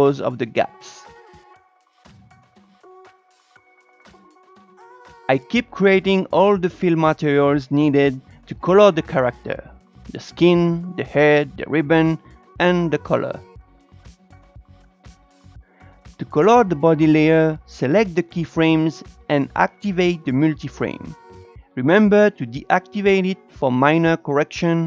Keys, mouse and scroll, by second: 0.0 Up, 0.0 Down, 0.1 scroll down 4, 0.2 scroll up 3, 0.4-5.0 drag, 6.5 click, 7.1 scroll down 1, 7.3 shift+middle click, 7.9 click, 10.1 click, 10.8-11.2 drag, 12.0 BackSpace, 12.3 scroll down 2, 12.3 shift+middle click, 12.8-14.2 drag, 14.3 click, 15.6-16.7 drag, 17.2 Tab, 17.5-18.9 drag, 20.9 click, 21.3 Up, 21.4 Down, 21.5 click, 21.7 Up, 21.7 click, 21.9 Up, 21.9 click, 22.1 Up, 22.2 click, 22.3 Up, 22.4 click, 22.5 Up, 22.6 click, 22.7 Up, 22.8 click, 22.9 Up, 23.0 click, 23.1 Up, 23.2 click, 23.3 Up, 23.4 click, 23.5 Up, 23.6 click, 23.7 Up, 23.8 click, 23.9 Up, 24.0 click, 24.1 Up, 24.2 click, 24.3 Up, 24.3 click, 24.5 Up, 24.5 click, 24.7 Up, 24.7 click.